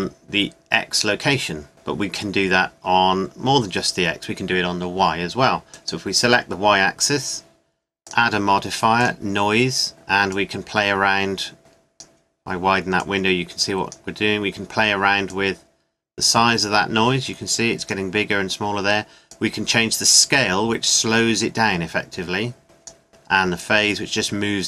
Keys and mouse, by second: 5.8 click, 7.5 middle click, 13.0-14.7 drag, 15.3 click, 19.5-21.1 drag, 23.7 click.